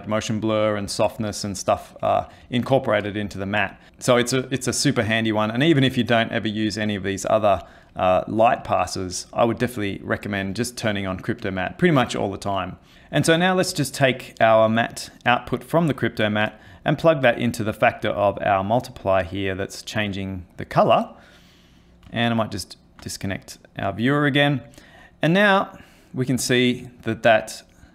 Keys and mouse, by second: 13.9 ctrl+middle click, 15.4 click, 17.0 click, 20.6 middle click, 22.4 ctrl+right click, 24.2 middle click, 26.0 click.